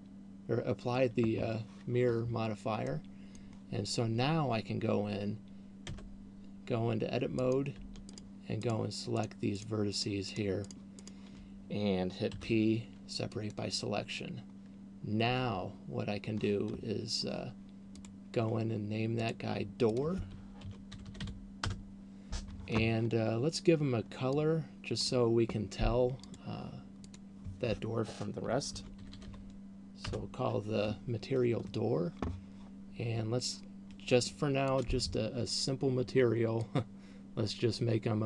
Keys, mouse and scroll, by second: 3.3 middle click, 6.0 Tab, 7.8 right click, 8.5 shift+right click, 9.5 shift+right click, 9.8 shift+right click, 10.8 shift+right click, 11.3 shift+right click, 12.5 p, 15.5 Tab, 18.3 click, 19.5 click, 20.0 click, 24.5 click, 26.5 click, 27.0 click, 33.0-34.8 scroll down 3, 34.8 click.